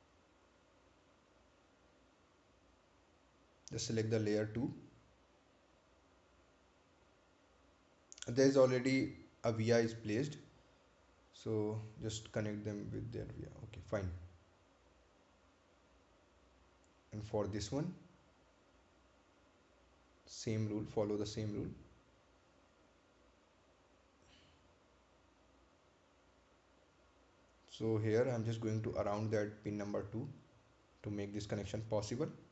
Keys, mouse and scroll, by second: 6.1 click, 12.7 click, 16.0-16.3 scroll down 1, 17.0 right click, 17.8 ctrl+click, 23.8 click.